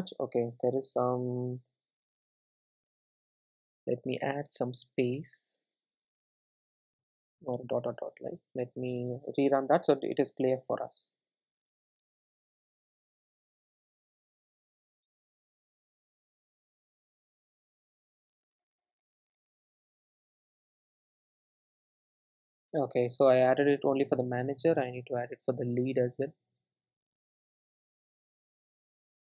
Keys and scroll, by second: 1.9 super+d, 7.3 super+s, 8.4 super+r, 19.0 super+s, 21.3 super+s, 21.9 super+r, 25.5 super+c.